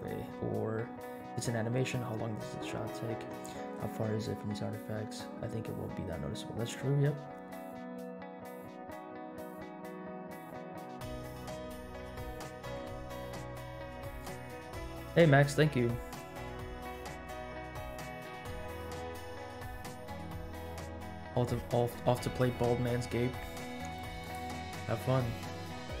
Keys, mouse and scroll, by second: 24.2-24.7 drag, 25.0 middle click, 25.4-26.0 scroll down 5.